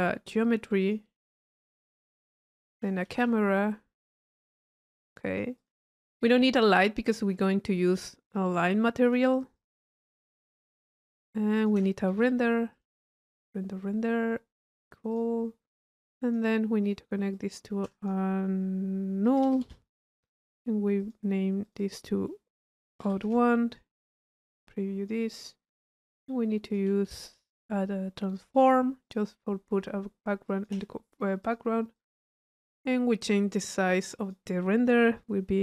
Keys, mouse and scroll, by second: 0.8 click, 1.8 click, 3.2 c, 4.0 click, 4.6 click, 5.0-6.1 drag, 7.0 click, 7.3 Tab, 8.0 click, 9.0 click, 11.6 click, 12.7 click, 14.6 click, 17.3-18.1 drag, 19.4 u, 20.4 click, 21.0 click, 21.6 click, 22.8 middle click, 23.8 click, 26.1 right click, 26.7 click, 28.6 click, 29.1 click, 30.4 drag, 31.4 click, 31.9 click, 32.7 click, 33.5 click.